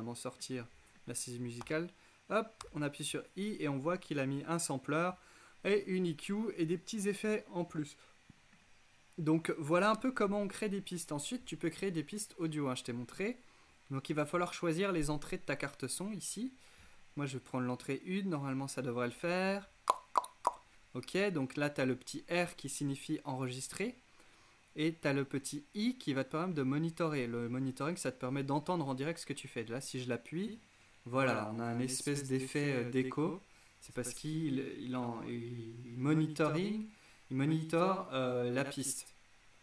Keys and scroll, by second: 1.7 y, 2.7 i, 9.9 BackSpace.